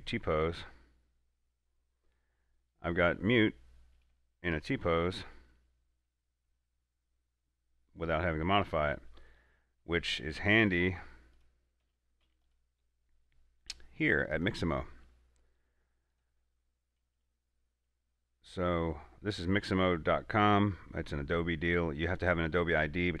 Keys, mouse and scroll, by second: 3.4 click, 3.4 middle click, 3.9-4.4 scroll up 2, 4.5-4.9 shift+middle drag, 4.9 scroll up 2, 5.2 a, 5.6-5.9 middle drag, 5.9-6.3 scroll down 2, 9.3 scroll down 1, 10.0 scroll up 1, 10.1 middle click, 11.0 click, 12.1-12.5 typing, 12.7 click, 16.8 typing.